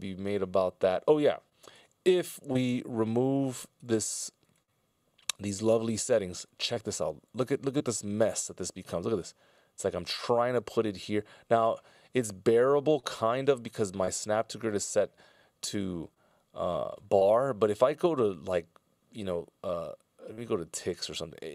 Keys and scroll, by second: 1.9 /.